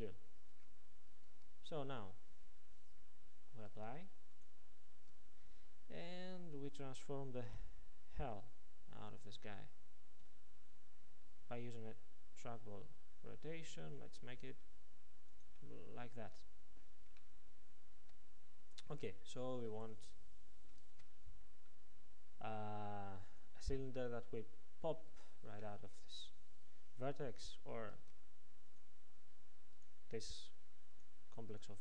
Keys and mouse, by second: 1.4 Tab, 2.1-7.6 drag, 3.6 Tab, 5.0 Tab, 7.6 r, 15.4 click, 20.9 ctrl+Tab, 28.0 ctrl+Tab, 29.8-31.8 drag.